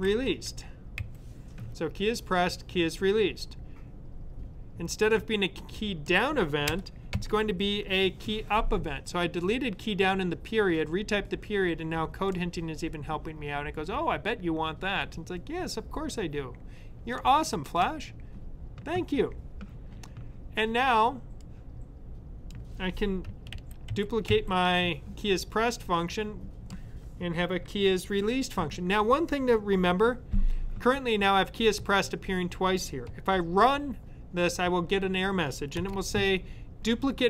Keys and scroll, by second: 0.0-0.9 typing, 23.4 super+c, 23.8 super+v.